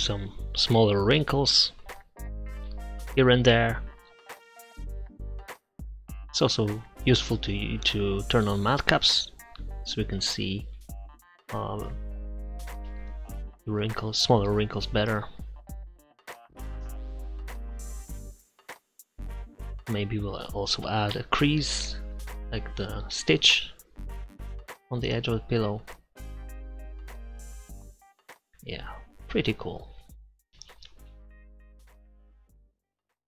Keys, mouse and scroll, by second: 0.0 middle click, 0.8 click, 1.4 click, 1.8 click, 2.3 middle click, 3.2 click, 3.5 click, 3.6 right click, 4.0-5.6 drag, 5.6 middle click, 6.1 click, 8.1-9.3 drag, 9.5 click, 10.3 middle click, 10.7 click, 11.3 middle click, 11.5 click, 12.3-13.6 middle drag, 13.3 click, 13.8 click, 14.8 middle click, 14.9 n, 15.3 click, 15.3 n, 15.4 middle click, 16.2-17.4 drag, 17.6 click, 18.4 click, 18.8 f, 19.1 click, 19.9 click, 20.3 middle click, 20.7 click, 22.5 middle click, 22.9 click, 23.3-24.4 drag, 25.7 click, 26.1 click, 26.6 click, 28.3 middle click, 28.9 click, 29.1 middle click, 29.2-30.9 drag, 29.2 right click, 30.9-31.9 middle drag, 32.5 click, 33.2 click.